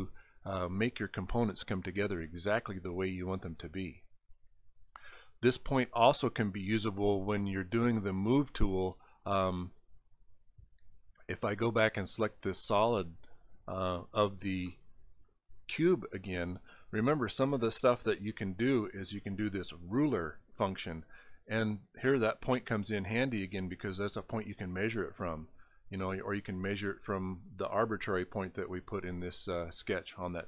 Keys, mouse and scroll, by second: 1.0 scroll up 2, 1.9 scroll up 1, 3.5 scroll up 6, 9.6 click, 11.7 click, 13.2 click, 13.8 click, 18.0 click, 20.6 click.